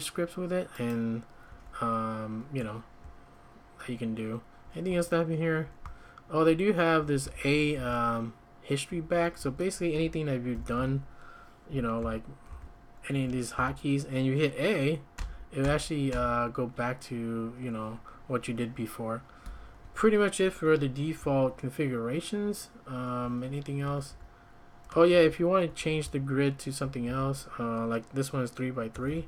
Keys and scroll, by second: 1.5 `, 3.0-7.7 typing, 8.9 Escape, 9.1 Escape, 9.4 `, 10.5 ctrl+;, 12.0-13.5 typing, 15.1-16.1 typing, 19.4 Escape, 19.8 `, 21.2-24.1 typing, 25.1 shift+g, 25.7 Escape, 25.8 Escape, 26.0 k, 26.5-26.8 k, 27.2 k, 28.9-29.2 typing.